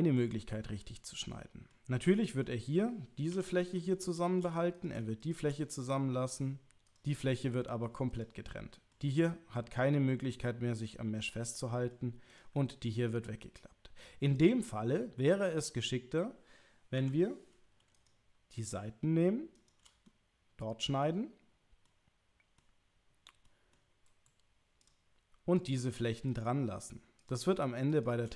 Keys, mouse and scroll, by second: 0.7 middle click, 2.2 middle click, 3.3 3, 4.1 shift+click, 4.7 click, 5.2 shift+click, 5.6 middle click, 6.8 click, 7.6 middle click, 8.7 middle click, 11.5 middle click, 12.3 click, 12.5 middle click, 13.4 middle click, 14.8 middle click, 17.0 2, 18.0 click, 19.6 shift+click, 20.8 middle click, 21.9 middle click, 23.4 middle click, 25.5 click, 26.3 shift+click, 27.9 shift+click.